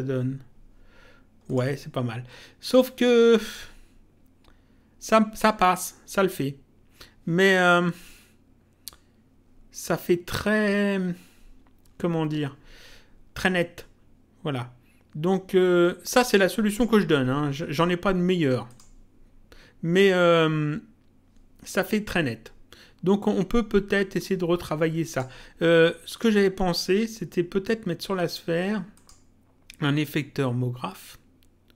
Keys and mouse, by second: 1.5 click, 2.7 click, 16.7 click, 18.7 click, 24.1 click, 26.1 click, 29.0 click.